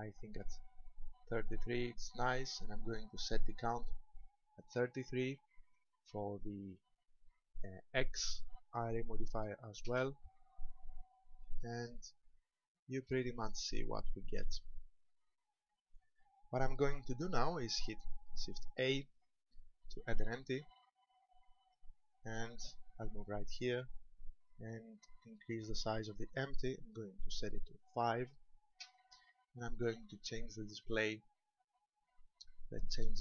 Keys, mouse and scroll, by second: 3.3 click, 12.0 shift+middle click, 13.3-13.7 scroll down 2, 14.2 scroll down 1, 14.7 shift+middle click, 18.7 shift+a, 23.5 click, 25.6 click, 30.9 click.